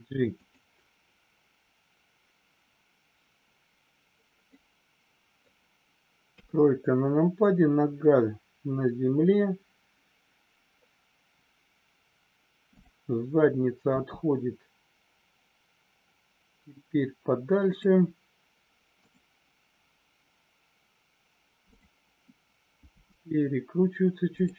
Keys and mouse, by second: 4.5 middle click, 6.3 KP_3, 12.7 click, 17.6 click, 18.9-19.6 drag, 21.6 click, 22.7 r.